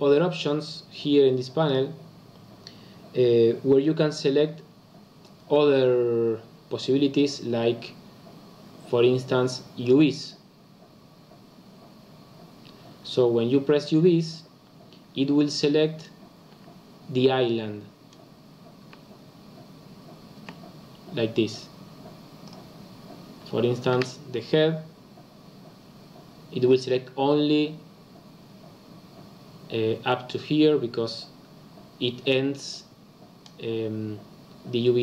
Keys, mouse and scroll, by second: 9.8 click, 16.5 l, 18.8 l, 19.2-20.0 scroll down 2, 20.3 l, 22.4 click, 23.9 l, 27.6-30.7 scroll up 2.